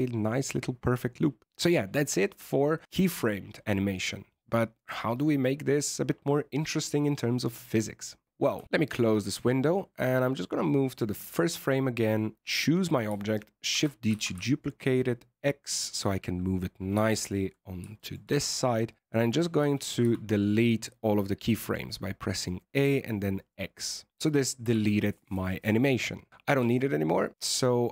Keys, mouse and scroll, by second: 9.1 scroll down 2, 9.3 shift+middle click, 10.8 click, 11.3 shift+middle click, 12.3 right click, 13.7 shift+d, 17.0 shift+scroll up 1, 17.0 shift+middle click, 17.9 shift+middle click, 19.2 a, 19.5 a, 19.9 x, 24.6 alt+a, 26.5 alt+a, 27.7 click.